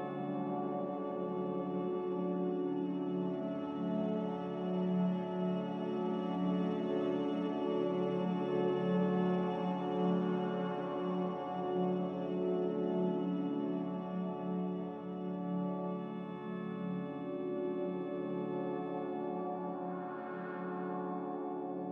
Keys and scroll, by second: 21.1 typing.